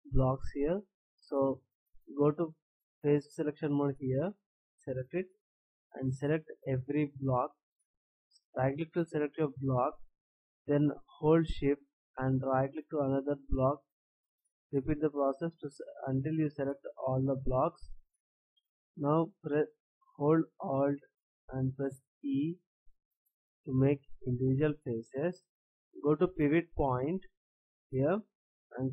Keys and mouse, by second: 4.1-6.0 drag, 6.0 right click, 6.7-7.8 drag, 12.5-14.9 drag, 28.5-28.9 drag.